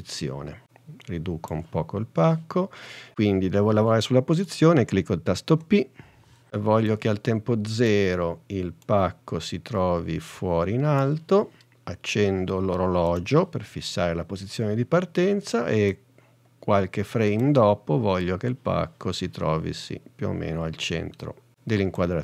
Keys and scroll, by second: 5.6 p.